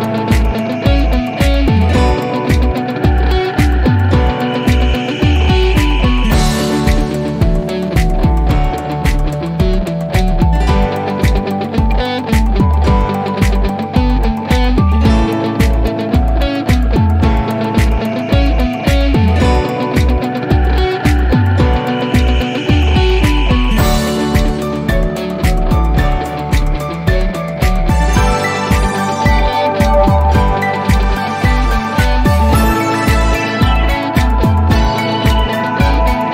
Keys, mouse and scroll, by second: 0.4-1.0 drag, 1.8 typing, 2.8 Return, 4.3 click, 6.5-7.0 click, 7.6 5, 8.0 Return, 11.7 click.